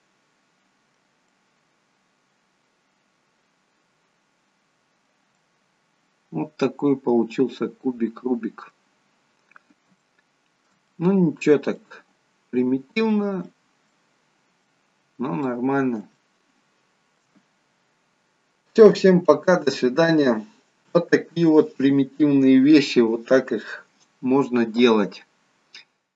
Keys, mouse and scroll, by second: 1.4 middle click, 5.5 middle click, 9.2-9.7 scroll down 1, 9.7 middle click, 9.7 scroll up 2, 10.0 shift+middle click, 11.0 middle click, 12.3 middle click, 15.2 scroll up 1, 15.5 middle click, 16.1-17.1 shift+scroll up 1, 17.1 shift+middle click.